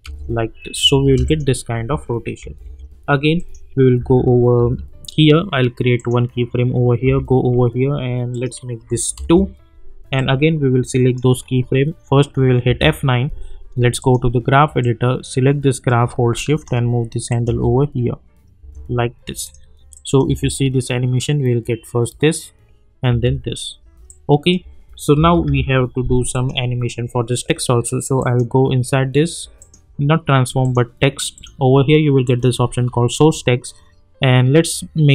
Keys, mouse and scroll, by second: 1.2 click, 2.4 -, 2.6 -, 3.3 click, 4.0 j, 4.6 k, 6.0 click, 7.0 k, 8.3 click, 9.1 Return, 10.1-12.6 drag, 12.6 F9, 14.0-17.3 drag, 17.4 space, 19.4 click, 20.2 space, 23.1 space, 24.0 click, 25.2 =, 25.4 =, 26.3 click.